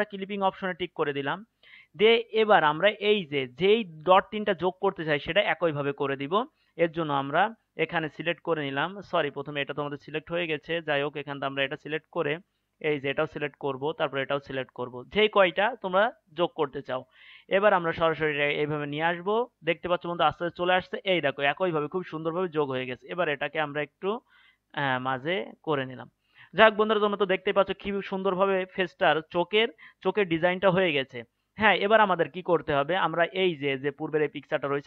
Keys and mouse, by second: 0.7-16.4 drag, 16.4-17.4 right drag, 17.4-21.0 drag, 23.2-26.2 drag, 26.2 middle click, 26.4-27.7 middle drag, 34.0-34.8 drag.